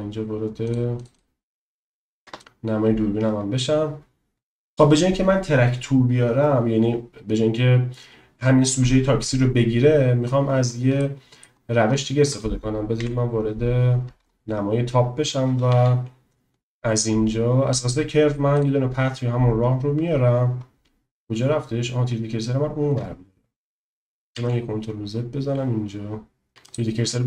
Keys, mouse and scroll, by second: 0.7 click, 2.3 KP_0, 11.0 click, 13.0 KP_7, 15.6 shift+a, 24.1 ctrl+z, 24.7 ctrl+z, 26.7 shift+click.